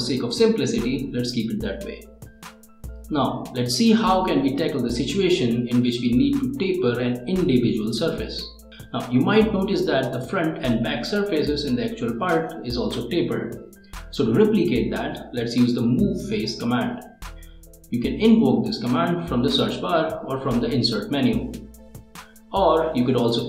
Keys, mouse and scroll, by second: 0.0-0.9 typing, 1.2 click, 10.3 click, 18.3 right click.